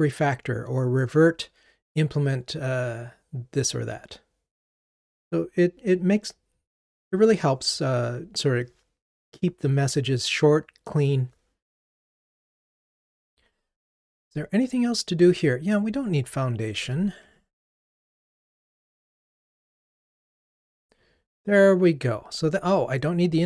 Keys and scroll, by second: 16.7 super+BackSpace, 17.7 ctrl+r.